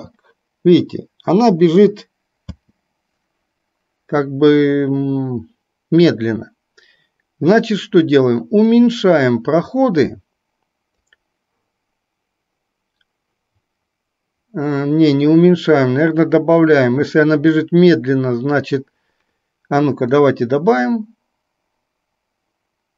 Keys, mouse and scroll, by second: 2.6 space, 8.8-11.1 drag, 20.2-22.9 drag.